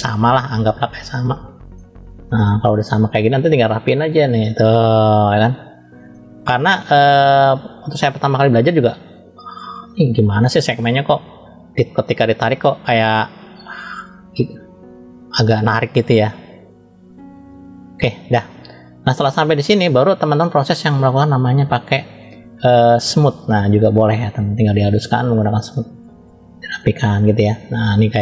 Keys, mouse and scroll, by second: 0.4-1.7 drag, 1.7-2.8 middle drag, 3.7 click, 6.0 middle click, 7.1-8.1 drag, 8.2 middle click, 9.5 click, 11.2 middle click, 12.7 click, 14.9 middle click, 15.5 scroll down 1, 15.9 middle click, 17.0 click, 17.4 click, 18.0-19.1 middle drag, 20.2 scroll up 1, 23.6 click, 25.6 click, 27.1 middle click, 27.8 scroll up 1.